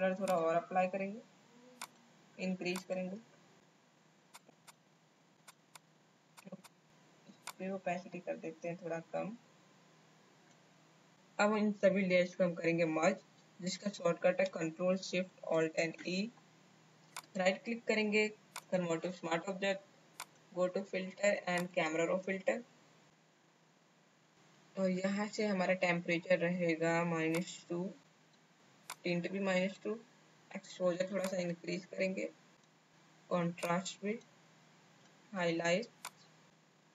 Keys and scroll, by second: 15.5 ctrl+alt+shift+e.